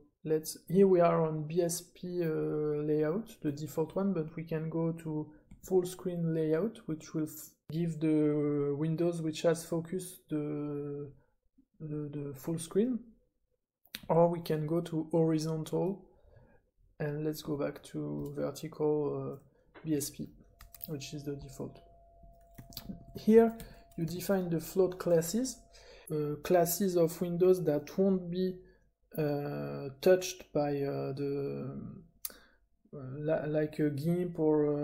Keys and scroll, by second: 5.5 super+f, 14.0 super+f, 17.4 super+f, 21.4-24.5 typing.